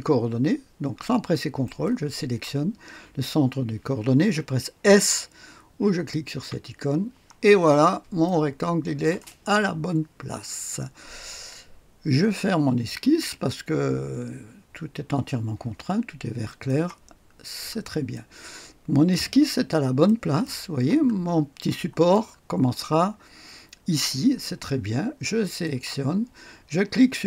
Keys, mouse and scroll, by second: 1.6 click, 6.3 s, 7.7-8.4 scroll up 1, 8.2 middle click, 16.4 click, 16.9 click, 17.3-18.1 scroll down 1, 18.1-19.5 drag, 19.5-20.0 scroll up 1, 20.0-21.1 right drag, 21.1-21.7 scroll down 1, 21.7 click, 22.3-22.8 scroll down 1, 22.8-24.4 scroll up 1, 24.4-25.4 scroll up 1, 25.4 click.